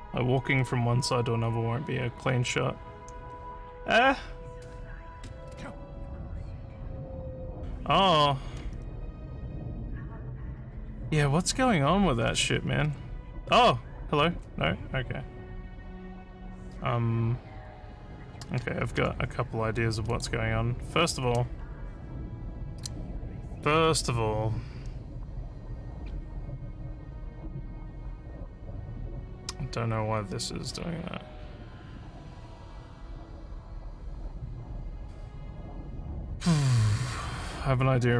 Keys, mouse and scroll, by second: 5.2 space, 9.2 w, 20.1 click.